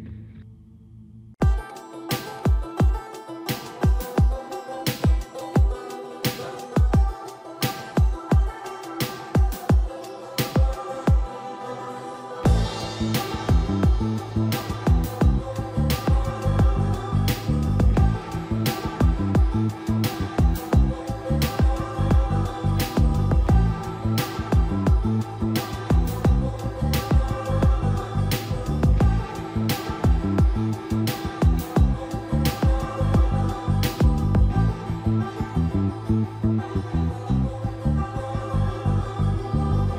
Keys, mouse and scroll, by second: 0.0 click, 1.7 scroll down 1, 3.8 click, 4.2-6.9 typing, 5.4-5.8 scroll up 1, 6.3 Escape, 8.1 scroll down 1, 8.9 click, 9.2 scroll up 1, 9.8 click, 10.4-11.5 typing, 12.1-12.5 scroll up 1, 12.9 shift+middle click, 15.0 scroll down 1, 15.7 shift+middle click, 17.2 click, 20.4 middle click, 20.6 scroll up 1, 21.5 ctrl+s, 22.0-22.3 scroll down 1, 22.3 middle click, 27.0-27.8 scroll down 1, 27.8 typing, 28.1 click, 28.9 scroll up 1, 29.3-30.4 typing, 31.4 click, 32.3 typing, 33.5 Return, 33.9-34.7 typing, 35.1 middle click, 35.5 scroll down 1, 35.8 middle click, 36.2-36.5 scroll up 1.